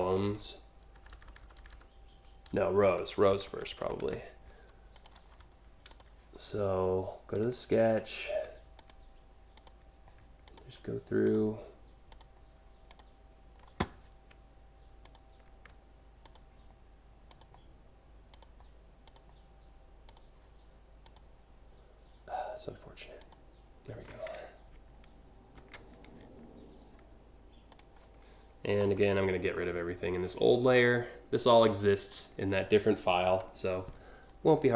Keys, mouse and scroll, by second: 0.0-4.1 typing, 4.6 click, 5.5 click, 7.0 click, 8.4 click, 9.2 click, 10.1 shift+click, 10.9 shift+click, 11.8 shift+click, 15.9 shift+click, 16.9 shift+click, 18.0 shift+click, 18.7 shift+click, 19.8 shift+click, 20.7 shift+click, 22.8 shift+click, 25.2 ctrl+c, 27.3 click, 28.4 scroll down 1, 29.2 scroll down 2, 29.8-31.7 drag, 33.1 Delete.